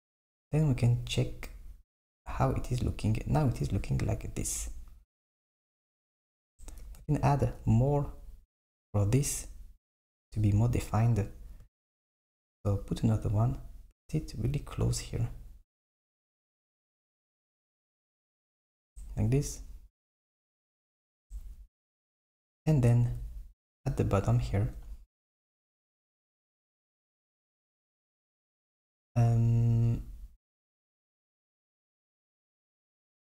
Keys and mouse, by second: 2.4 click, 5.2 Tab, 7.8 Tab, 11.9 r, 16.6 r, 20.7 Tab, 22.4 Tab, 26.5 click, 28.1 click.